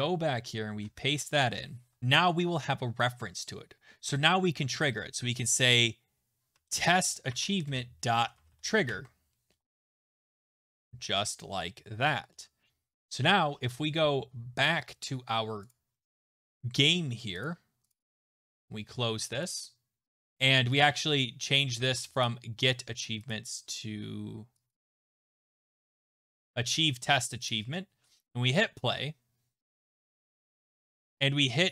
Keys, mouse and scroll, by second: 0.7 ctrl+v, 1.4 click, 2.0 Return, 6.3-9.0 typing, 10.0-10.8 typing, 11.1 ctrl+s, 15.7 click, 17.1 click, 17.4 click, 18.6 click, 24.9-26.7 typing, 27.5 click, 28.6 click, 28.6 t, 31.5 click.